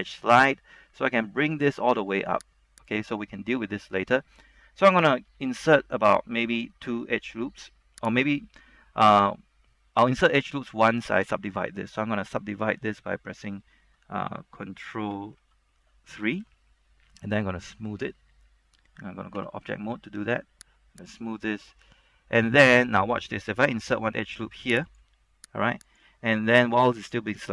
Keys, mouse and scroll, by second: 0.1 click, 3.9-4.4 scroll down 1, 4.4 middle click, 5.7 ctrl+r, 6.5-8.4 scroll up 1, 8.4 right click, 9.0-13.0 middle drag, 15.4 ctrl+3, 19.6 Tab, 21.1 click, 21.8 Tab, 22.2-22.6 scroll up 1, 22.6 middle click, 23.1 scroll down 1, 24.0 ctrl+r, 25.0 click.